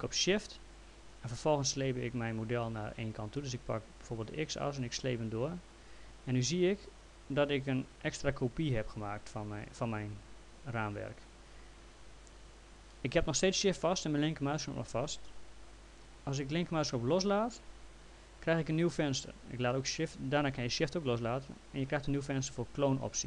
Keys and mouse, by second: 4.8 shift+click, 22.2 click.